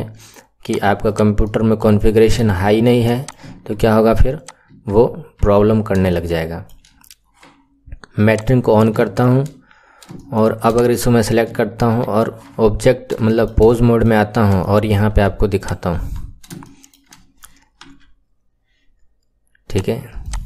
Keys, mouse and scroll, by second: 0.6 click, 1.4 middle click, 2.0-2.4 scroll up 3, 2.4 shift+middle click, 3.1 click, 3.6 Tab, 4.3 click, 4.8 Tab, 5.3 KP_1, 5.6 scroll down 2, 6.0-8.2 shift+middle drag, 8.2 click, 8.9-9.4 shift+middle drag, 9.4-10.0 scroll up 5, 10.0-10.6 shift+middle drag, 10.6 click, 12.0 ctrl+Tab, 13.2-14.2 shift+middle drag, 14.2 scroll up 2, 14.5-15.6 shift+middle drag, 15.6 click, 15.8 KP_1, 16.2-16.6 scroll up 4, 16.6-17.8 shift+middle drag, 17.8 r, 20.2 click.